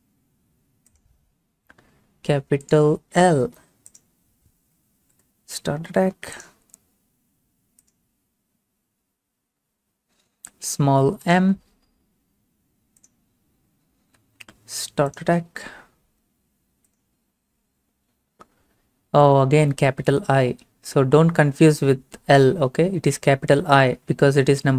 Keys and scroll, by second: 5.1 l, 14.1 m.